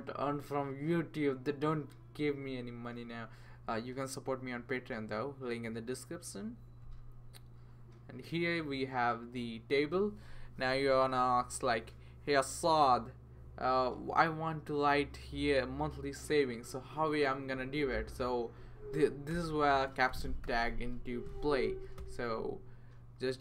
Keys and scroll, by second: 19.3 Return, 20.4 typing, 21.7 Down, 22.0 Return.